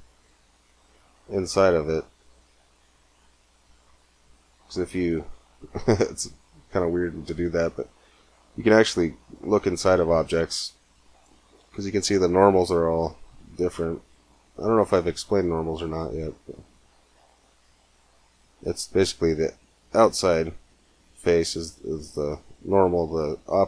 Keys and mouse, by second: 2.9 middle click, 4.3 middle click, 4.7-5.8 middle drag, 6.4-8.1 middle drag, 8.2 middle click, 10.1 middle click, 13.9 middle click, 16.3 middle click, 17.1-18.8 middle drag, 19.3 middle click, 20.5 middle click, 20.7 middle click.